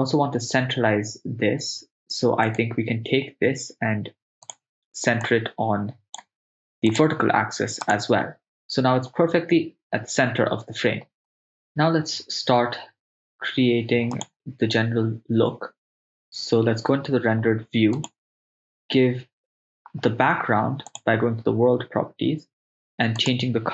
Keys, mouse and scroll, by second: 2.5 click, 2.5 right click, 4.5-6.3 drag, 6.9-8.0 drag, 15.4 click, 18.0 click, 20.9-23.4 drag.